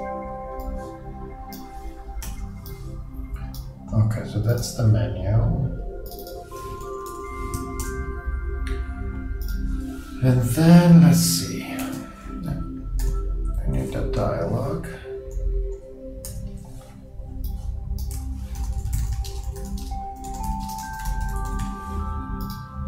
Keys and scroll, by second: 2.2 super+g, 6.6-7.5 typing, 18.3-20.9 typing.